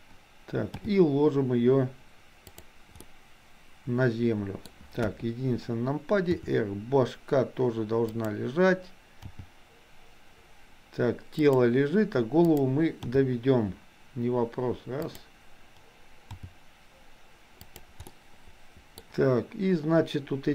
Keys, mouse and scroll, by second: 0.6 g, 3.0-4.6 middle drag, 4.6-5.1 scroll down 1, 5.1 KP_1, 6.4 r, 9.4 g, 13.0 g, 16.4 g, 18.1 middle click.